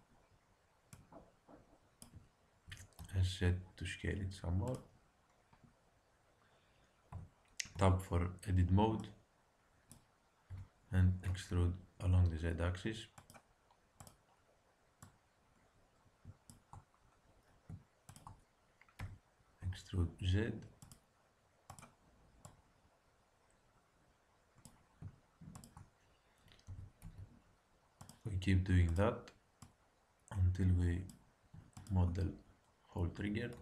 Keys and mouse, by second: 0.9-2.4 drag, 2.6 s, 7.1 Tab, 7.7 a, 8.7 b, 10.4 e, 13.9-16.8 drag, 18.0-19.9 drag, 18.9 e, 21.6-24.3 drag, 25.5-27.3 drag, 26.6 e, 28.8-31.2 drag, 31.7-33.1 drag, 33.1 e.